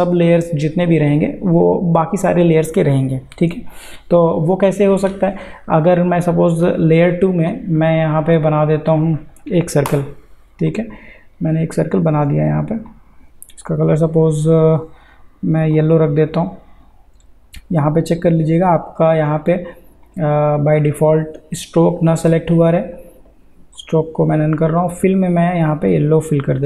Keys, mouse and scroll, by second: 6.6 click, 8.9 click, 9.9 l, 10.7-13.9 drag, 18.7 click, 23.8 click.